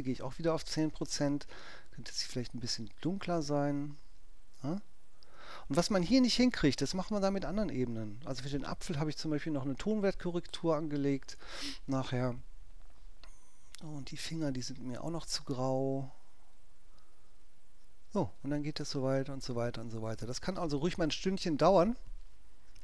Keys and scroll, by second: 0.4 ctrl+alt+i, 20.9 space.